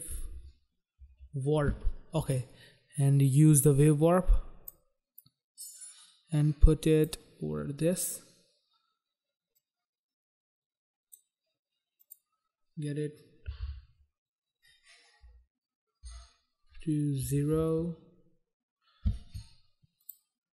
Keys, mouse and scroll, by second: 0.0-1.3 typing, 3.7 click, 5.3 click, 9.6 click, 12.2 click, 12.3 click, 13.5-14.3 typing, 15.4 BackSpace, 16.2 BackSpace, 17.4 typing, 17.8 Return, 20.2 click, 20.3 click.